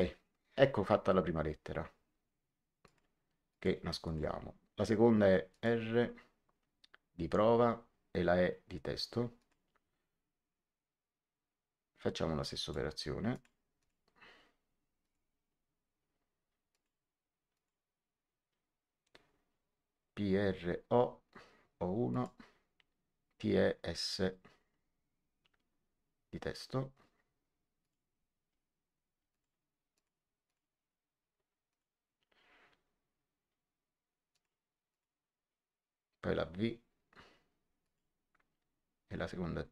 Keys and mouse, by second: 2.8 click, 5.4 click, 9.3 click, 12.5 click, 14.9 click, 16.6 click, 22.0 click, 27.7 click, 29.2 click, 31.6 click, 34.2 click, 37.8 click.